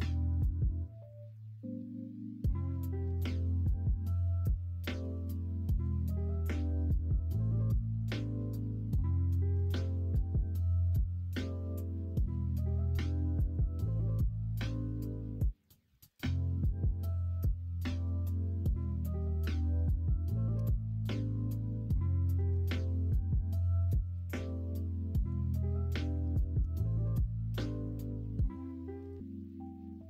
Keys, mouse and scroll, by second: 1.3-2.7 middle drag, 3.8 Tab, 5.0 g, 7.8 Tab, 8.5-9.7 middle drag, 10.5-12.1 middle drag, 12.8 shift+middle click, 13.3 middle click, 14.8 Tab, 17.7-19.1 middle drag, 20.5 g, 24.3 middle click, 25.3 ctrl+z, 25.7 middle click, 26.3 g, 28.8 middle click, 29.6 e.